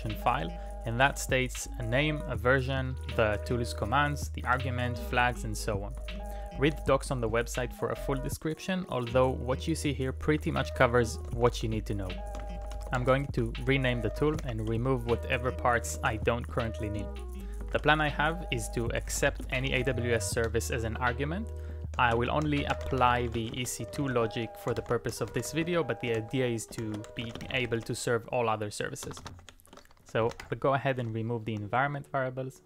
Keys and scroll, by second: 2.0 Up, 2.6 Up, 4.5 Return, 6.0 w, 6.6 l, 6.8 l, 10.3-16.6 typing, 17.6 shift+c, 18.8-30.9 typing.